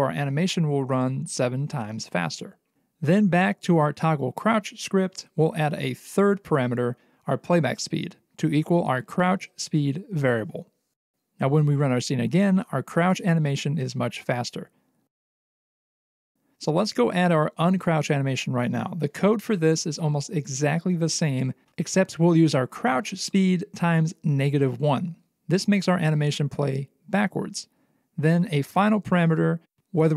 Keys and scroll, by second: 5.6 space, 9.6 Return, 11.2 ctrl+s, 14.9 c, 28.4 ,, 29.8-30.1 typing.